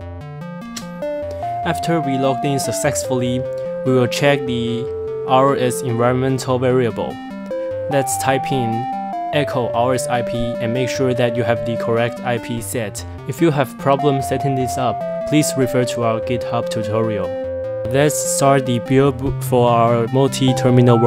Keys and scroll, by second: 0.0-1.2 typing, 3.2-11.1 typing, 12.3 Return, 16.4-18.7 typing, 20.9 F2.